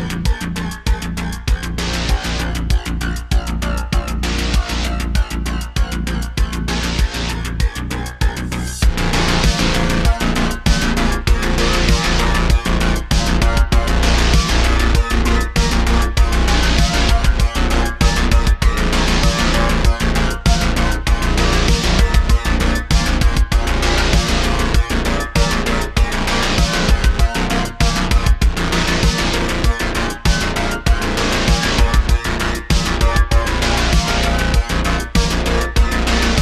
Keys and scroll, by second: 1.8 s, 3.8 `, 10.6 h, 11.2 ,, 11.6 super+z, 11.8 /, 15.2 shift+a, 19.2 s, 24.1 `, 35.3 Tab, 35.9 3.